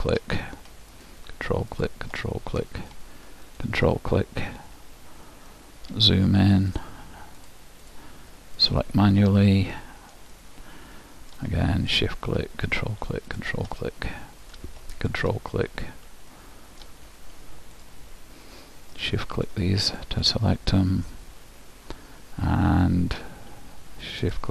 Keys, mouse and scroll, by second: 2.3-4.3 middle drag, 5.6-7.5 middle drag, 6.8-10.5 drag, 9.8-12.2 middle drag, 12.0-16.8 drag, 13.8-16.4 middle drag, 16.5-18.3 middle drag, 17.9-21.9 drag, 21.2-23.1 middle drag, 24.3-24.5 drag.